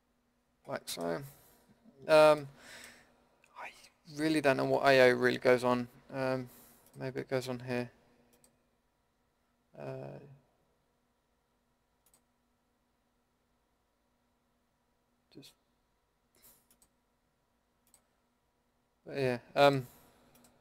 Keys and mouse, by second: 0.0 click, 0.9-6.9 middle drag, 6.9-20.6 drag.